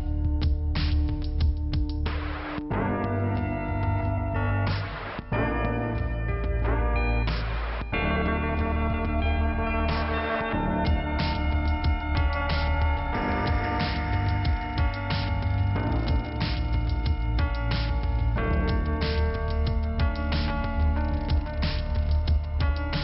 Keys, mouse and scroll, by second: 0.5 scroll up 1, 1.9 click, 2.7 click, 4.3 click, 9.4 click, 13.5 middle click, 15.7 click, 17.4 click, 18.8 click, 22.2-22.8 scroll down 1.